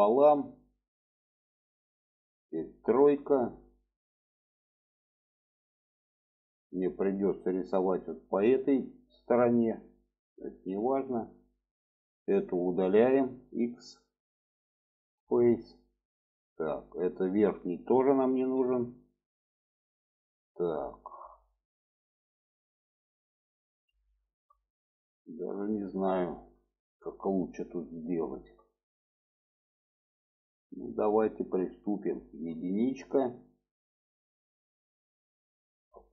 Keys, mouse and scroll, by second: 3.0 3, 4.9-5.9 middle drag, 6.3-8.4 middle drag, 9.3 alt+middle click, 10.5 click, 13.0 x, 15.7-16.3 middle drag, 17.2 click, 18.5 x, 19.7-23.8 middle drag, 24.2 shift+middle click, 25.2 shift+middle click, 26.6 shift+middle click, 28.1 shift+middle click, 32.3 1, 33.1 click.